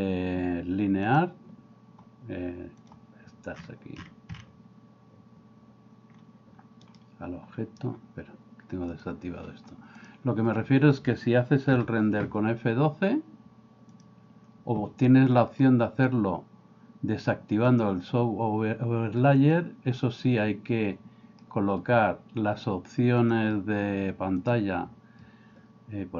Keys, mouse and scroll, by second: 1.1 click, 2.8 click, 8.9 click, 10.0 click, 14.1 F12, 17.7 click, 19.4-20.4 drag, 23.3 drag, 24.5-26.1 drag.